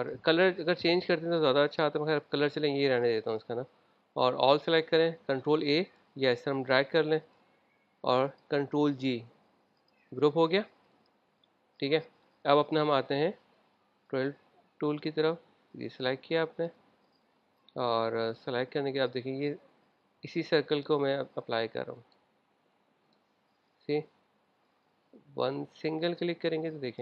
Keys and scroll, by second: 5.1 super+a, 8.5 super+a, 9.2 super+g.